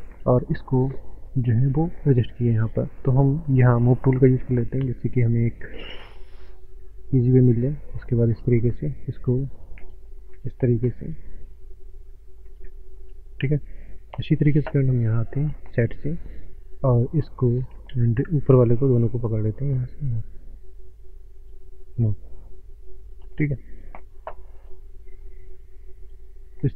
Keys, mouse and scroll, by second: 1.0 scroll up 1, 1.4 shift+middle click, 2.0 click, 5.2 shift+middle click, 6.4 click, 13.4 shift+middle click, 14.4 click, 18.0 ctrl+z, 18.6 shift+click.